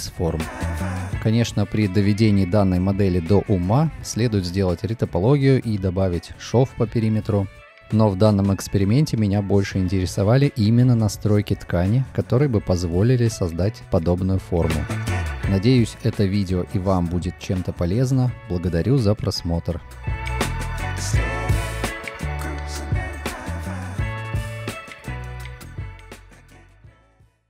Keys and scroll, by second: 1.6 F4, 3.8 F4, 6.1 F6, 6.5 F6, 6.9 F6, 9.6 F6, 9.9 F6, 14.5 F6.